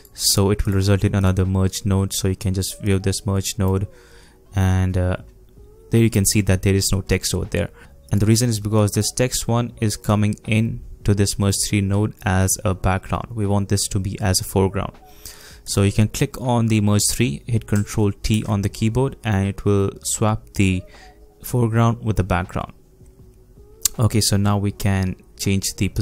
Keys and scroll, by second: 18.3 ctrl+t.